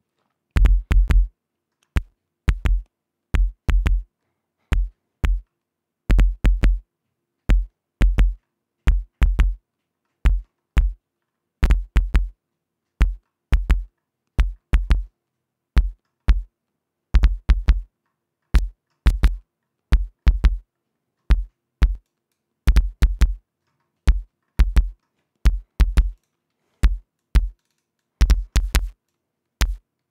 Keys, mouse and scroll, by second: 1.7-2.5 scroll down 2, 2.7-3.4 scroll up 4, 4.2 scroll down 2, 4.7 scroll down 2, 5.8 scroll down 2, 8.7-9.1 scroll up 2, 10.4-12.0 scroll down 8, 13.6-13.9 scroll down 2, 14.3-15.2 scroll up 4, 16.5-16.9 scroll down 2, 17.8-18.3 scroll up 2, 18.3-19.1 scroll up 1, 19.4-20.3 scroll down 2, 20.7-21.0 scroll down 2, 21.2-22.0 scroll up 4, 22.7-23.1 drag, 24.2-24.6 scroll down 2, 24.6-25.4 scroll up 4, 25.7 scroll up 2, 26.8 click, 27.8 click, 29.1-29.4 scroll down 2, 29.7-30.1 drag.